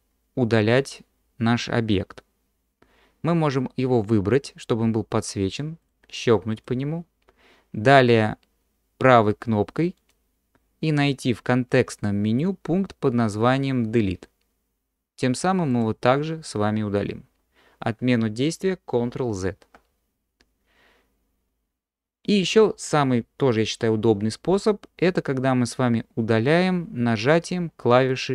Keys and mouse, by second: 6.6 click, 10.0-15.9 drag, 19.5 ctrl+z.